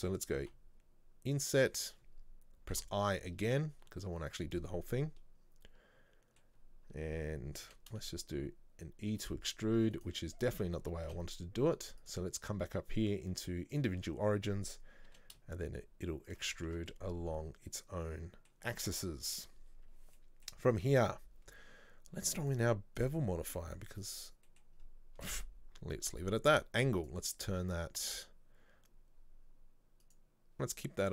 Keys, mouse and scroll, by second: 0.5 i, 4.6-7.7 middle drag, 7.7 e, 11.1 ctrl+z, 13.8-15.1 drag, 15.1 e, 16.6 scroll down 1, 16.7 Tab, 17.0-24.2 middle drag, 24.2 click, 24.5 middle click, 24.8 scroll up 1, 27.1 click, 28.8 scroll down 2, 30.1 click.